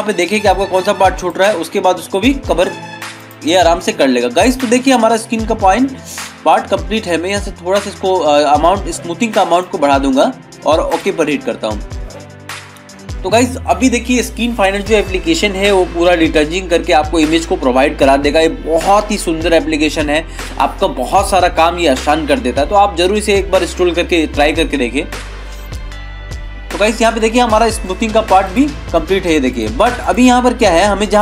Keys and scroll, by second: 27.5 ctrl+=, 31.1 ctrl+-.